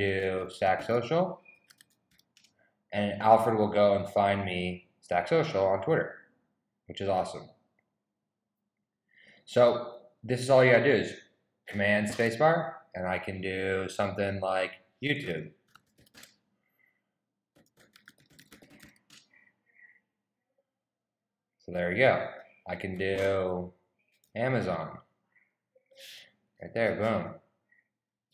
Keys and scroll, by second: 0.0-2.8 typing, 14.8-20.0 typing, 23.9-26.5 typing.